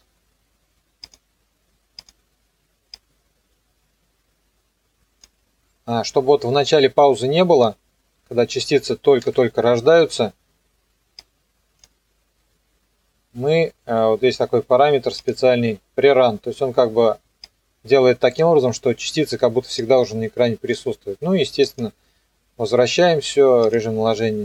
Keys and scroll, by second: 9.2 alt+/.